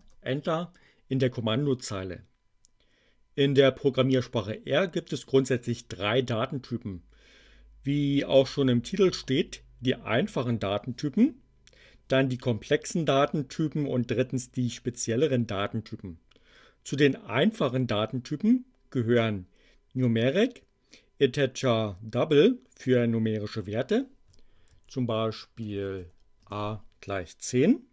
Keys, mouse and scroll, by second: 0.0 Return, 24.6-26.4 typing.